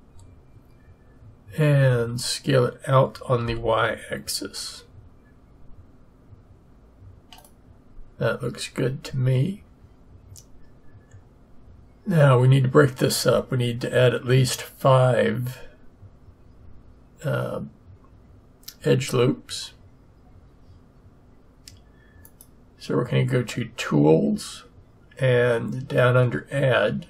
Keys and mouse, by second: 1.8 s, 22.2-24.1 drag.